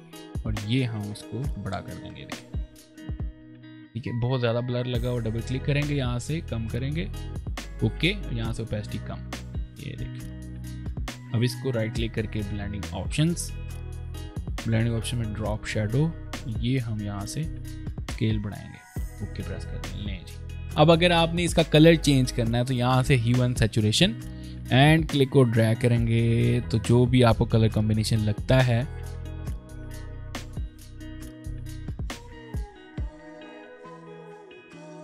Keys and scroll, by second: 3.0 ctrl+space, 10.8 v, 19.8 space.